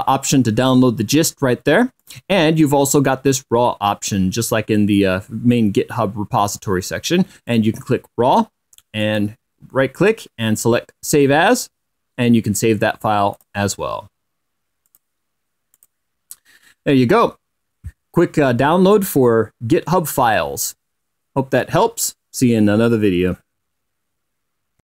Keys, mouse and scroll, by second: 2.7 click, 8.2 click, 9.7 right click, 11.8 click, 14.1 click, 15.6 click, 16.5 click.